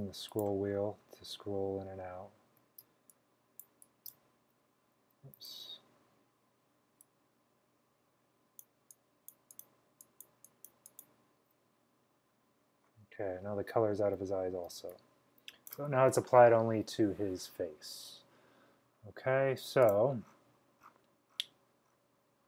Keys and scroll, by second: 2.9-4.1 typing, 5.5 super+z, 6.1 typing, 14.8 space, 15.3 space, 15.4 space, 15.5 space, 18.6 typing.